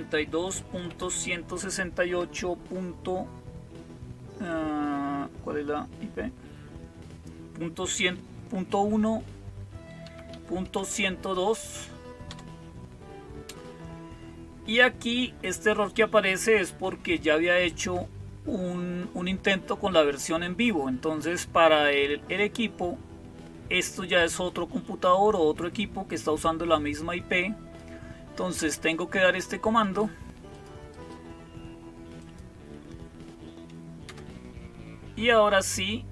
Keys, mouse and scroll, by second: 0.0-0.7 typing, 2.1 typing, 7.8 typing, 9.7-11.1 typing, 12.1 Return, 24.1-27.7 drag, 29.7-32.8 drag, 33.9 Return, 36.0 Up.